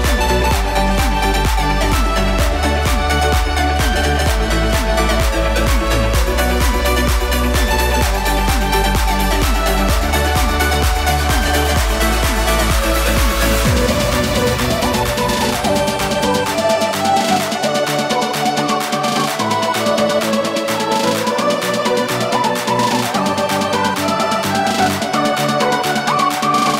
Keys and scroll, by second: 14.0 space.